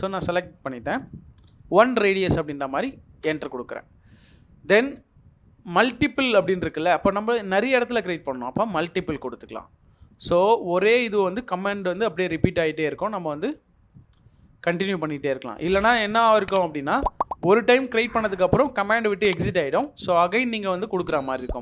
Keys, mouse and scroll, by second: 1.5 1, 3.2 Return, 10.1-10.8 scroll up 1, 11.5 middle click, 20.9 scroll down 1, 21.1 middle click.